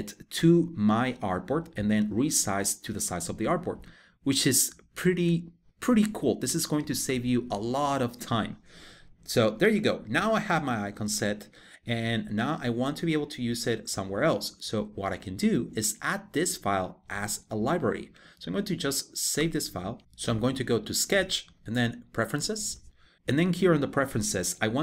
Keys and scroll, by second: 9.4 super+1, 19.0 super+s.